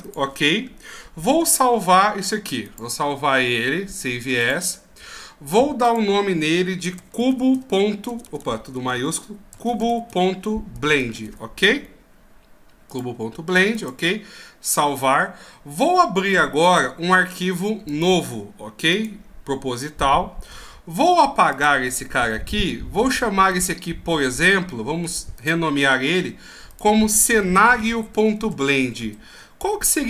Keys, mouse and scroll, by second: 0.6-1.7 scroll up 3, 2.6 click, 13.9 click, 16.6 click, 23.5 ctrl+q.